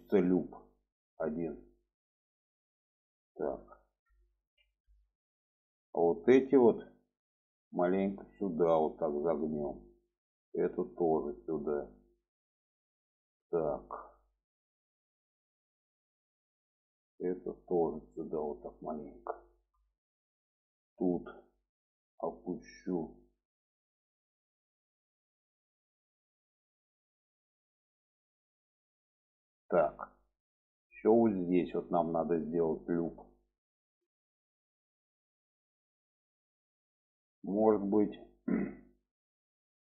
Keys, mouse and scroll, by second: 3.5 middle click, 4.4 alt+z, 5.4 middle click, 6.4-7.1 drag, 7.6-9.6 drag, 11.0 click, 12.3 click, 14.8 click, 16.1 click, 16.6 click, 17.7 click, 19.0 click, 19.8 shift+middle drag, 20.6-21.4 drag, 22.2 click, 24.3 click, 25.1 click, 27.5 click, 28.1 click, 29.4 click, 30.2 middle click, 31.1 alt+z, 31.3-37.4 middle drag, 37.9 middle click, 39.6 middle click.